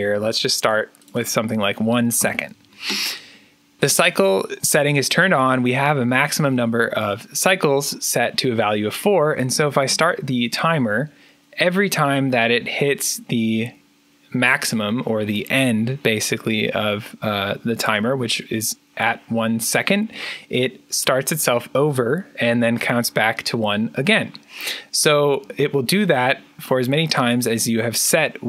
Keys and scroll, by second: 1.9 1, 2.1 Return, 9.3 2, 9.7 3, 11.9-12.6 typing.